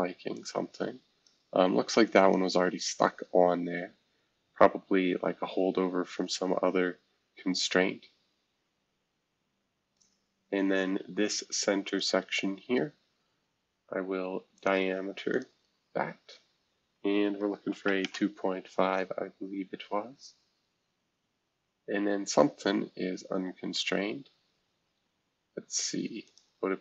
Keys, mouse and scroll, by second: 0.3-2.3 drag, 4.0-5.7 scroll down 1, 5.7-6.2 scroll down 1, 6.2-7.5 scroll up 1, 7.5-8.3 scroll up 1, 8.9-9.9 scroll up 1, 9.9-11.9 drag, 11.9 middle click, 12.0-13.4 drag, 14.5 middle click, 14.7 click, 15.3 middle click, 15.4-16.9 drag, 17.1-18.3 typing, 19.4 scroll down 2, 21.3-21.8 scroll up 1, 21.8 scroll down 1, 22.5 scroll up 1, 23.7 click, 24.4-26.2 scroll down 1, 26.2 click.